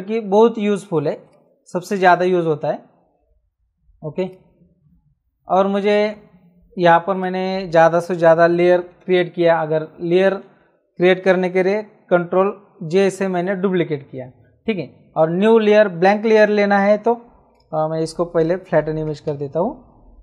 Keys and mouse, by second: 1.2 click, 4.2 click, 7.1 click, 19.2 alt+l, 19.9 alt+f.